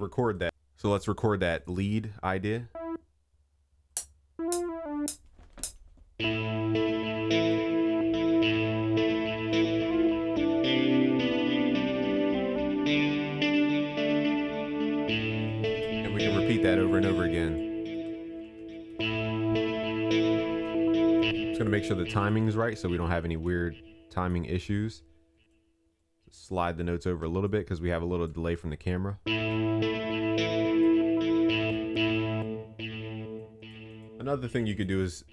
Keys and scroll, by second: 18.5 ctrl+s, 19.2 ctrl+s, 23.2 ctrl+a.